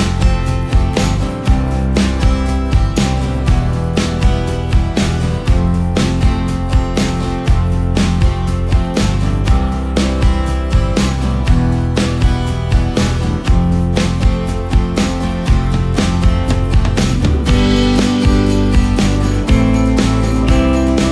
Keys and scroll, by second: 1.2 ctrl+space, 3.9 ctrl+space, 18.5 ctrl+z.